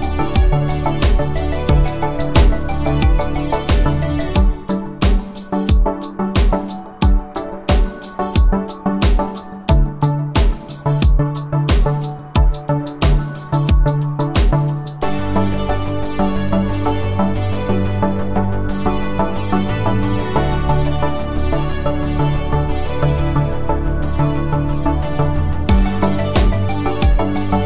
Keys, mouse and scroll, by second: 4.1-5.3 click, 7.6-9.5 click, 12.2 space, 15.7 space, 19.0 click, 24.0 ctrl+click, 25.1 u, 27.0 click.